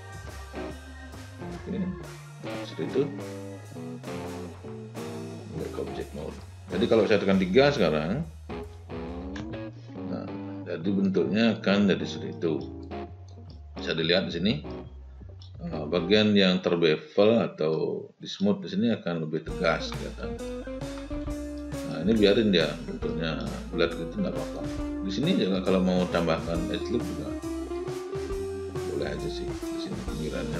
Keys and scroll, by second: 9.4 3.